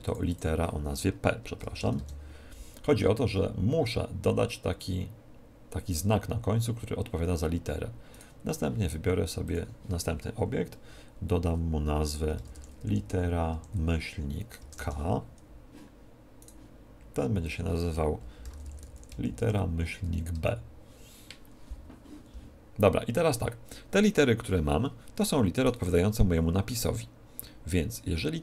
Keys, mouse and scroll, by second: 0.0-1.8 drag, 8.1 right click, 9.4-11.1 drag, 16.3 right click, 17.4-19.1 drag, 19.2 click, 25.5 right click.